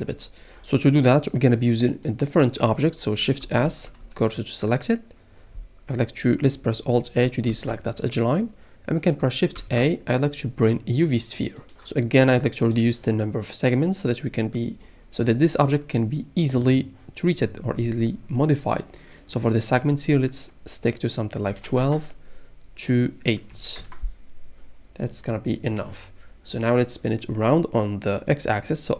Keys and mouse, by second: 3.6 shift+s, 7.5 alt+a, 9.6 alt+a, 12.6 click, 19.5-21.9 drag, 22.8-23.9 drag, 25.7 click.